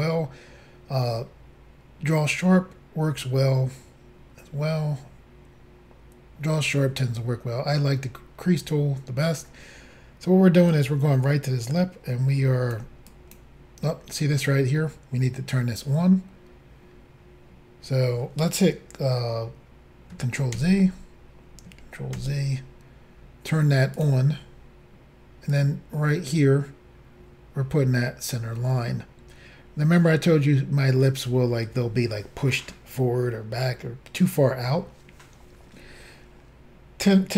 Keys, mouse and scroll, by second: 10.7 click, 13.1 click, 20.6 ctrl+z, 22.2 ctrl+z, 24.0 click, 25.5 click.